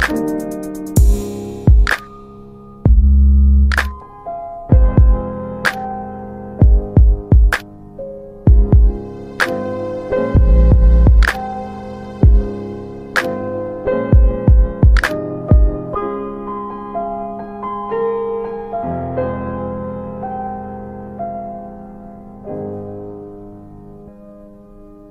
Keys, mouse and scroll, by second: 0.9 click, 2.5 double click, 4.0 F4, 4.6 alt+middle click, 10.9 click, 11.3 double middle click, 11.3 scroll down 3, 12.5 alt+middle click, 13.4 click, 14.0 right click, 15.4 click, 16.6 right click, 17.6 click, 18.7 z, 20.4 F3, 20.4 alt+middle click, 21.2 F3, 21.6 F3, 23.1 F4.